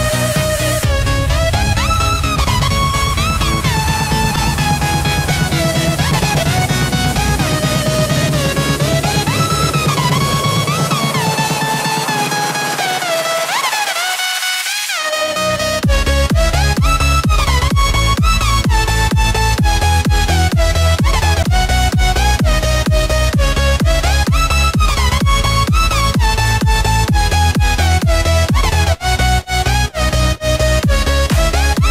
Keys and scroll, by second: 5.6 ctrl+alt+z, 7.6 ctrl+d, 19.2 ctrl+t, 21.2 Return.